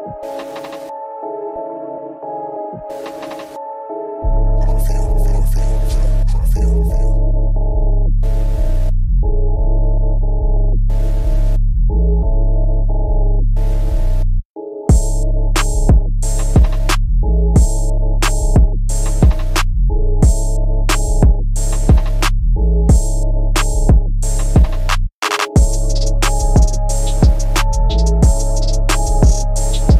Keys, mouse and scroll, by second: 0.3 scroll up 1, 0.9 shift+middle click, 1.0 middle click, 1.9 click, 2.0 click, 2.3 middle click, 3.8 click, 4.0 click, 4.3 middle click, 6.3 scroll down 1, 11.8 click, 12.6 click, 12.6 click, 13.6 click, 13.7 click, 14.7 middle click, 15.2 g, 16.5 click, 16.6 click, 16.8 middle click, 17.5 scroll up 1, 17.9 middle click, 18.4 middle click, 19.4 click, 20.1 1, 21.0 r, 22.2 click, 22.6 g, 23.7 click, 24.2 middle click, 25.4 middle click, 25.5 middle click, 26.1 1, 26.6 ctrl+3, 27.3 scroll up 2, 27.6 shift+middle click, 28.5 g, 29.9 click.